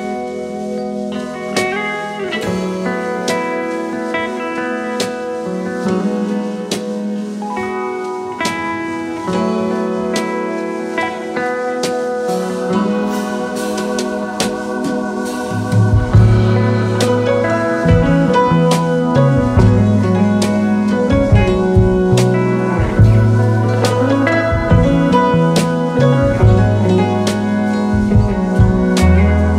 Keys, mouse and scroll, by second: 0.2 alt+scroll up 1, 2.0 alt+scroll down 1, 6.2 typing, 6.3 double click, 8.1 double click, 8.7 space, 8.9-9.5 space, 14.9 typing, 19.2 alt+scroll up 2, 19.5 space, 21.0 space, 21.0 alt+shift+click, 22.2 ctrl+t, 24.0 ctrl+a, 24.2 typing, 24.4 Return.